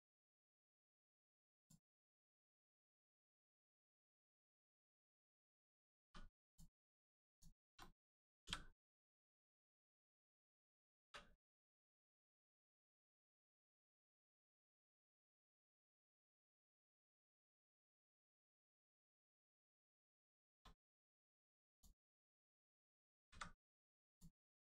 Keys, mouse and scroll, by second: 1.6 click, 2.4 middle click, 3.4-3.8 scroll down 1, 3.9 middle click, 4.8 scroll up 1, 5.0 middle click, 5.6 scroll down 1, 6.4 click, 7.3 shift+click, 7.8 middle click, 10.4 middle click, 11.4 click, 12.0 middle click, 12.9-13.3 scroll down 1, 13.4 middle click, 15.3 shift+middle click, 15.7 middle click, 15.8 middle click, 17.0 shift+middle click, 17.4 middle click, 17.5 middle click, 17.8 scroll down 1, 18.0 middle click, 19.8 scroll up 1, 20.4 shift+middle click, 20.6 middle click, 20.6 middle click, 21.0 scroll up 1, 21.7 click, 22.1 shift+click, 22.6-22.9 scroll down 1, 24.1 click, 24.5 middle click.